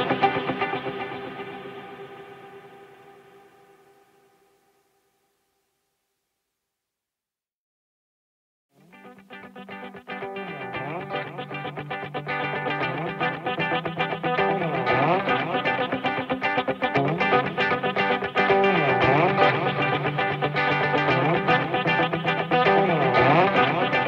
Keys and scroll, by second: 23.5 ctrl+z.